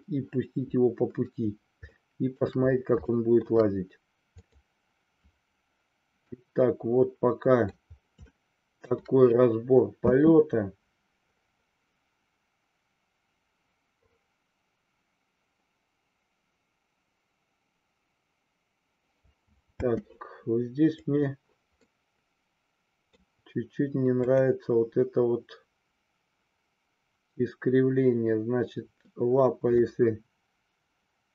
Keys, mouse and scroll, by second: 1.9-2.4 shift+middle drag, 3.0-3.4 shift+middle drag, 4.8-5.2 drag, 6.3-7.8 middle drag, 8.4-8.9 shift+middle drag, 9.9 space, 19.8 space, 20.9 click, 21.9-23.2 middle drag, 24.2 click.